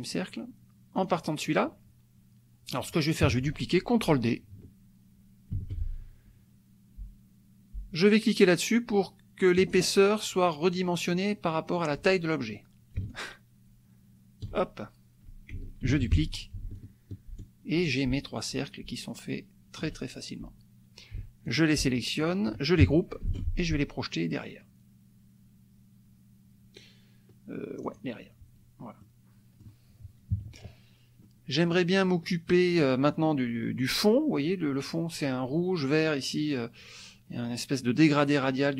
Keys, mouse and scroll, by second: 1.0 click, 3.2 KP_Subtract, 5.5 ctrl+d, 9.6 click, 13.0-14.8 ctrl+shift+drag, 15.9 ctrl+d, 16.8-19.9 ctrl+shift+drag, 21.5 shift+click, 22.2 shift+click, 23.2 ctrl+g, 27.8 click, 29.0-30.0 drag, 30.3 KP_Subtract, 31.2 click, 32.5 click.